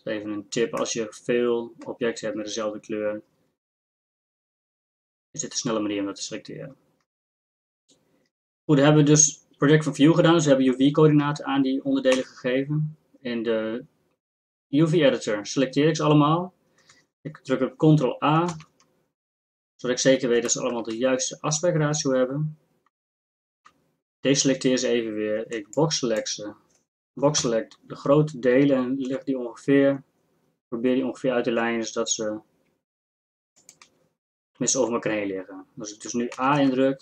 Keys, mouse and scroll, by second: 0.9-3.0 middle drag, 12.2 a, 18.5 ctrl+a, 23.6 a, 25.5 b, 27.4 ctrl+l, 29.1 g, 36.4 a, 36.6 a.